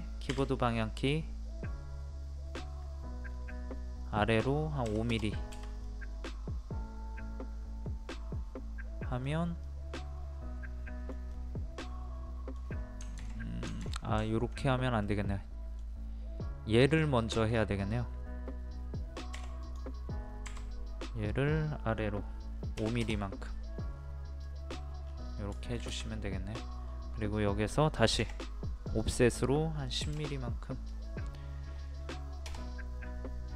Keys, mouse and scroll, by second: 0.3 Up, 3.2-3.7 scroll up 1, 4.8 KP_5, 5.8-9.2 middle drag, 9.2-9.6 scroll down 1, 9.6-13.0 middle drag, 15.0-16.3 middle drag, 16.9 click, 17.3-18.4 shift+middle drag, 19.3 m, 19.6 click, 22.8 KP_5, 24.4 middle click, 24.7 scroll down 1, 25.4 scroll up 1, 25.5 shift+middle click, 26.9-28.2 scroll up 1, 28.2 o, 28.8 click, 30.0 KP_1, 33.4-33.5 scroll down 1.